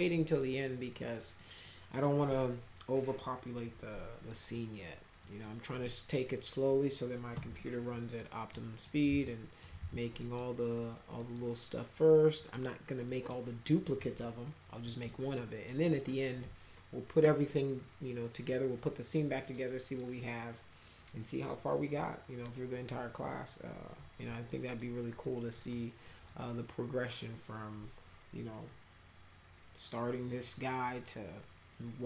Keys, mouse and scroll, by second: 0.1 middle click, 1.4 middle click, 4.3 middle click, 5.2 middle click, 7.5 p, 8.2 middle click, 8.8 middle click, 9.3 alt+middle click, 9.8 z, 10.2 middle click, 11.2 middle click, 12.4 middle click, 13.1 middle click, 13.7 middle click, 14.0 middle click, 14.8 middle click, 15.3 middle click, 24.5 middle click, 25.2 middle click, 25.8 middle click, 26.3 middle click.